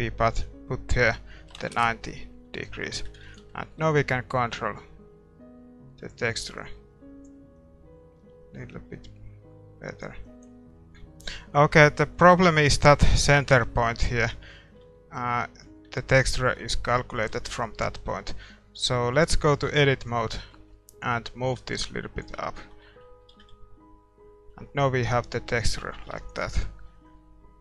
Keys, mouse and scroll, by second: 4.4 ctrl+s, 4.4-6.2 drag, 4.4 middle click, 5.4 middle click, 6.6-9.3 drag, 10.4 click, 10.6-14.9 middle drag, 10.6 shift+z, 11.4 ctrl+s, 14.8 Tab, 15.9 Tab, 16.5 shift+z, 17.4 shift+z, 19.1 Tab, 19.6 a, 20.0 a, 21.2-22.8 drag, 21.2-22.2 middle drag, 22.6 Tab, 22.6-25.7 middle drag, 23.4 shift+z, 26.2 ctrl+s, 27.2-27.6 drag.